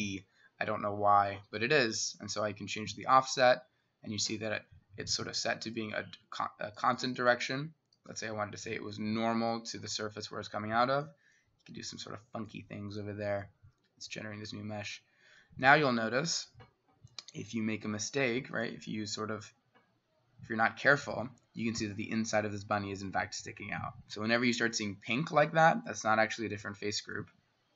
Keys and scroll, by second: 18.8 Escape.